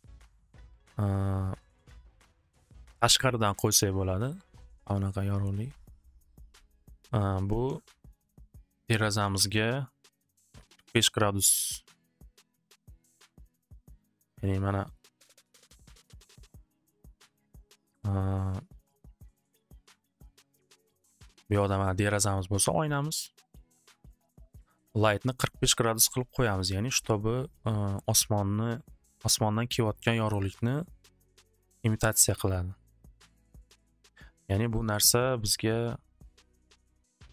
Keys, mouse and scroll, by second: 0.2 click, 0.8 click, 2.2 click, 3.1 middle click, 3.6 click, 4.3 middle click, 5.6 click, 6.2 middle click, 7.3 alt+w, 7.5 alt+w, 8.6 alt+w, 9.2 z, 9.5 alt+w, 10.7 click, 12.2 click, 12.3 click, 12.7 click, 12.9 click, 12.9 9, 13.1 9, 13.3 Return, 14.1 middle click, 15.1 middle click, 15.9 F3, 16.7 middle click, 19.5 click, 20.4 click, 24.5 click, 26.6 click, 30.1 click, 31.3 click, 35.8 click, 36.6 click.